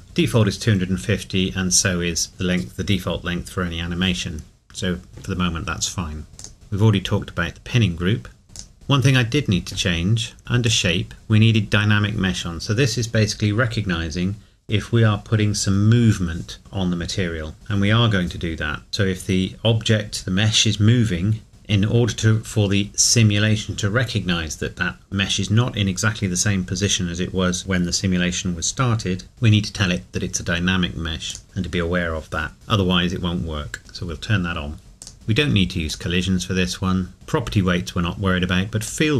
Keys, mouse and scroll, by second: 6.4 click, 8.5 click, 10.7 click, 11.1-12.2 scroll down 1, 31.3 click, 35.0 click, 35.1-35.7 scroll down 1, 36.3-36.7 scroll down 1, 38.8 click.